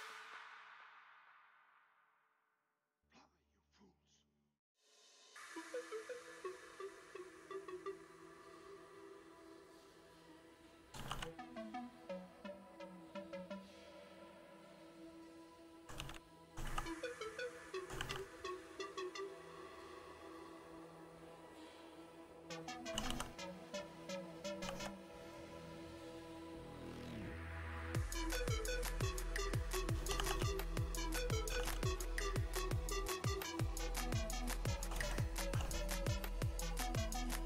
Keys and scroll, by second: 9.8-11.1 typing, 14.9-20.3 typing, 21.7-26.2 typing, 26.8 Return, 27.6-30.2 typing, 31.2-35.9 typing, 36.6 shift+Return, 37.1-37.4 typing.